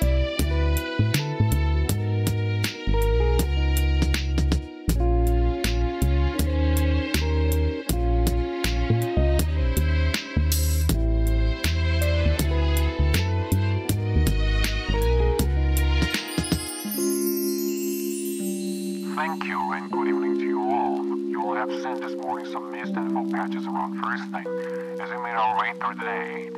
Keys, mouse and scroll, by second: 0.3 alt+z, 1.8 ctrl+r, 3.9 ctrl+r, 5.0 ctrl+b, 6.0 click, 6.6 ctrl+z, 7.5 ctrl+r, 8.5 ctrl+b, 9.9 ctrl+click, 10.2 Tab, 10.8 ctrl+s, 11.2-12.0 middle drag, 13.5 right click, 14.0 click, 14.5 right click, 15.2-15.8 middle drag, 16.3 shift+middle drag, 16.7-18.3 middle drag, 19.4-20.0 middle drag, 22.4 shift+a, 24.2-26.5 drag.